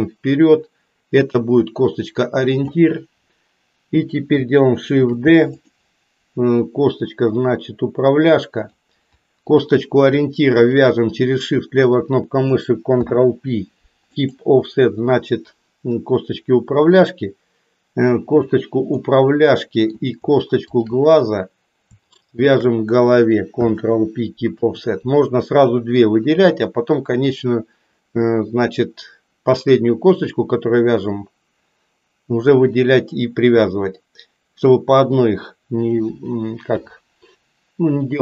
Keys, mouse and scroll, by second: 5.0 shift+d, 6.6-8.7 drag, 9.4 click, 10.6 shift+click, 13.0 ctrl+p, 18.2 click, 19.0-20.0 middle drag, 20.6 shift+click, 22.4 shift+click, 23.5 ctrl+p, 36.8 KP_7.